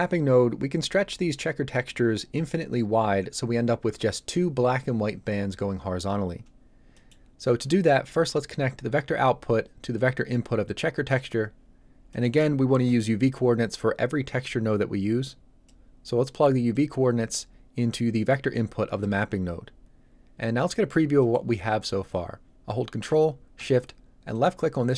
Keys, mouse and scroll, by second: 6.9 middle click, 9.2 click, 11.7 scroll down 1, 12.0 middle click, 15.2 click, 21.1 middle click, 21.4 scroll up 1, 24.3 ctrl+shift+click.